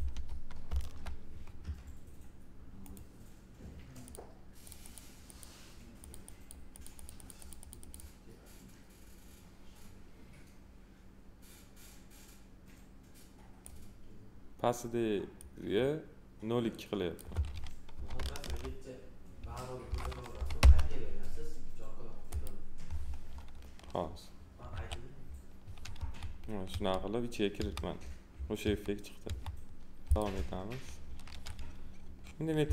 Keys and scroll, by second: 0.6 Return, 18.0 2, 18.4 Return, 19.8 0, 20.6 Return, 24.7 2, 25.9 F4.